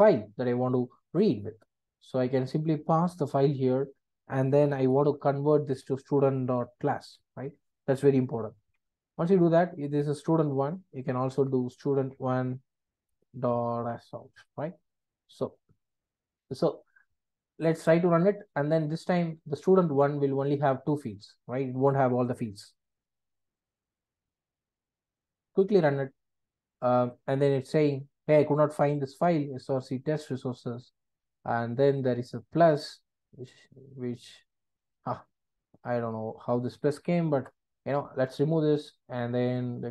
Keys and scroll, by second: 3.8 Return, 8.6 Return, 13.0 Return, 18.4 super+F8.